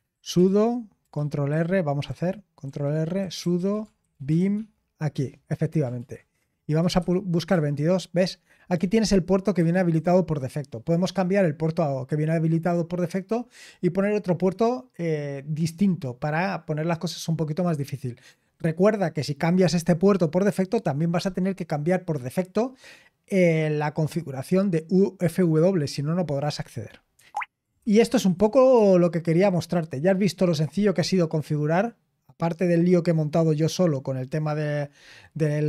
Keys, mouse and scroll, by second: 0.1 ctrl+c, 1.2-2.5 typing, 2.6 ctrl+e, 3.8 c, 5.1 ctrl+r, 5.9-7.4 typing, 8.7-9.8 typing, 27.1 Escape, 27.5-28.8 typing.